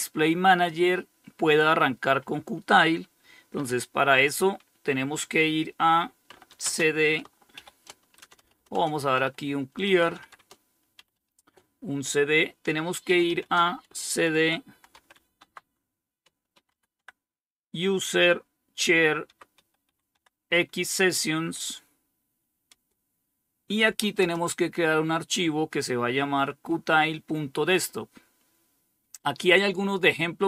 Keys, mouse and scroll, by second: 5.5-10.7 typing, 12.2-16.7 typing, 18.3-19.6 typing, 21.9 Return, 22.8-23.6 typing.